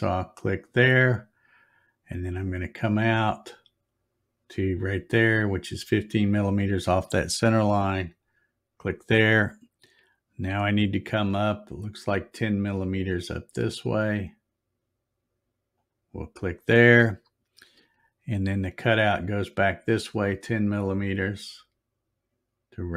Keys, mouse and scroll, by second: 0.3 click, 8.0 click, 15.7 click.